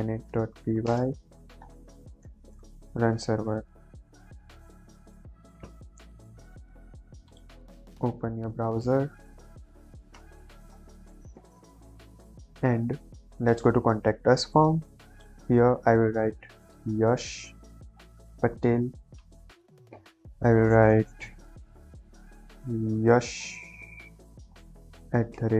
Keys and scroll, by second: 0.0-0.8 typing, 1.9-2.7 typing, 2.9 Return.